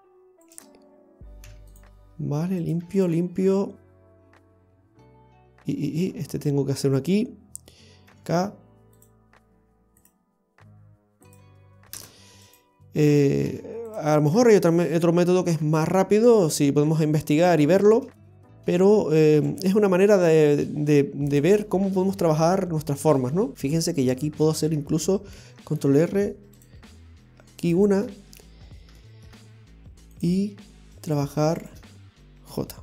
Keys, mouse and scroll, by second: 0.5 right click, 1.4 x, 2.6 right click, 2.8 x, 4.3 middle click, 12.4 right click, 13.5 x, 14.3-14.6 scroll down 1, 14.6 middle click, 18.3 right click, 19.4 g, 21.7-22.2 scroll down 1, 22.2 middle click, 23.5 middle click, 23.5-23.9 scroll up 2, 25.4 ctrl+r, 28.1 middle click, 28.5-29.0 scroll up 2, 29.0 shift+middle click, 30.1 click, 31.4 right click, 31.6 shift+right click.